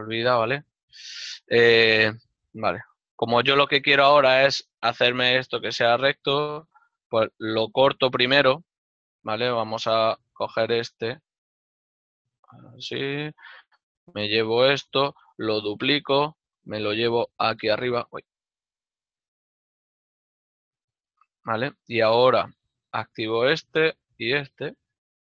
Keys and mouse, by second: 2.3 ctrl+middle click, 10.4 alt+right click, 11.0 alt+right click, 12.2 ctrl+b, 21.6 shift+middle click, 24.0 right click, 24.9 shift+right click.